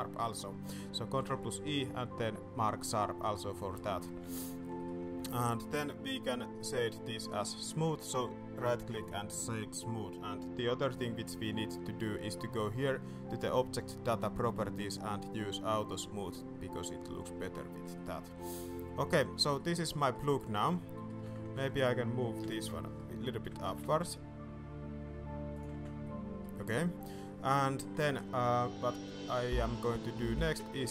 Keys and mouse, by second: 1.1 ctrl+e, 3.6 click, 3.8 shift+click, 4.2 Tab, 4.3 middle drag, 4.7 shift+middle click, 5.2 middle drag, 5.8-6.2 drag, 7.1 click, 9.5 middle click, 16.1 click, 17.5 middle drag, 17.9 shift+middle click, 18.4-19.5 middle drag, 19.9 middle click, 20.2 shift+middle click, 20.9 middle click, 21.2 Tab, 21.5 alt+a, 22.4 l, 22.8 middle click, 23.4 g, 25.7 Tab, 26.0-26.4 middle drag, 26.5 middle drag, 27.0 shift+middle drag, 27.3-27.8 middle drag, 28.0 shift+drag, 29.9 click.